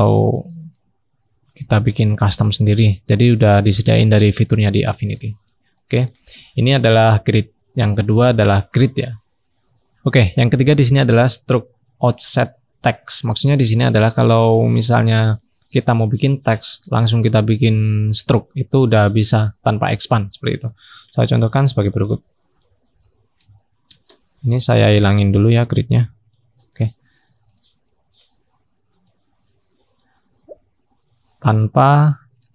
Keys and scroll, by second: 1.1-2.5 scroll up 1, 2.5-4.5 scroll down 1, 6.5-8.5 scroll up 1, 21.4-23.4 scroll down 1, 27.1-29.2 scroll down 1, 30.4-31.5 scroll up 1, 31.5-32.4 scroll down 1.